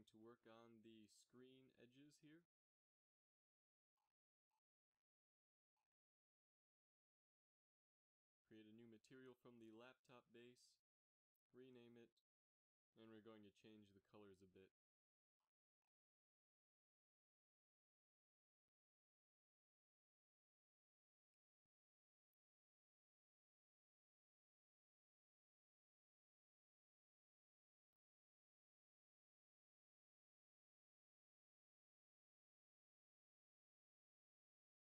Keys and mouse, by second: 0.7 z, 0.9 z, 1.3-2.5 drag, 2.5-4.1 middle drag, 12.4 e, 15.6-17.4 drag, 19.9 KP_3, 21.3 middle click, 21.8 shift+z, 33.1 click.